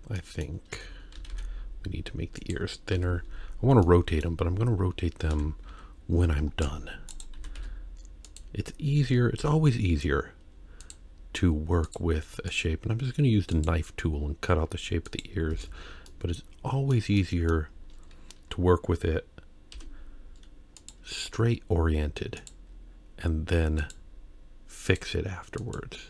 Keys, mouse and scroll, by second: 0.2 middle click, 0.7 a, 1.2 s, 3.0 KP_3, 3.8 middle click, 5.3 alt+a, 5.7 c, 7.4 s, 9.4 k, 16.1 middle click, 17.2 middle click, 17.7-18.5 scroll up 1, 19.7 k.